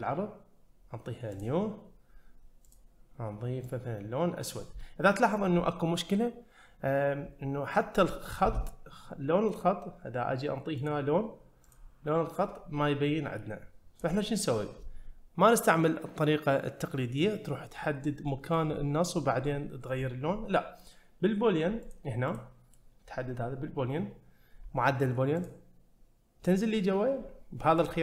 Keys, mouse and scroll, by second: 1.3 click, 2.7 click, 4.8-5.1 middle drag, 9.5 click, 10.8 click, 11.6 click, 18.3 middle click, 21.8 click, 22.3 click, 25.4 click, 27.8-28.0 drag.